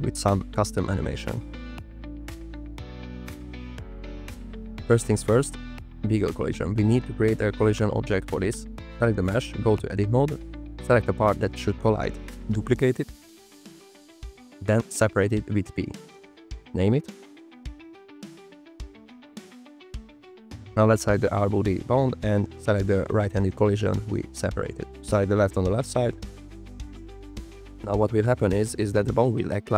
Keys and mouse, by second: 0.7 KP_0, 1.9 click, 2.3 click, 8.9 n, 9.6 click, 9.8 middle click, 11.3 l, 12.2 l, 13.7 shift+d, 14.9 p, 15.9-17.0 drag, 17.0 Tab, 18.2 l, 18.4 shift+d, 18.6 p, 18.9 click, 19.4-20.8 shift+drag, 21.1 n, 22.6-24.2 drag, 25.0-26.4 drag, 26.8 typing.